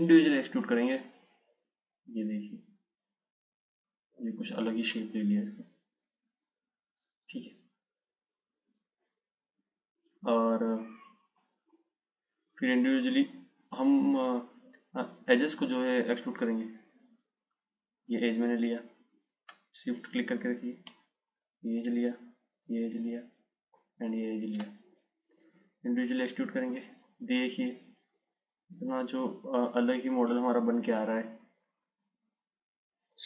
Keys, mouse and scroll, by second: 11.6 click, 13.8 click, 15.7-18.7 drag, 20.2 shift+click, 22.1 shift+click, 24.0 shift+click, 25.6 click.